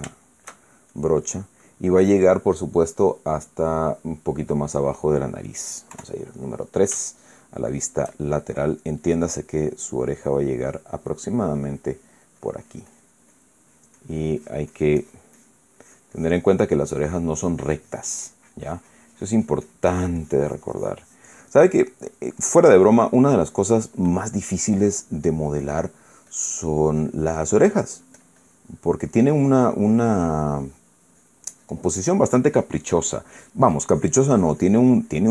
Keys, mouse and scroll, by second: 0.4 middle click, 1.3 shift+middle click, 1.6 shift+click, 2.3-5.1 middle drag, 6.6 KP_3, 7.8-8.8 shift+middle drag, 10.7-11.7 drag, 13.1-14.0 drag, 14.4-16.4 drag, 16.5-22.4 drag, 22.8-29.9 drag, 30.0-32.2 drag, 32.3-35.3 drag.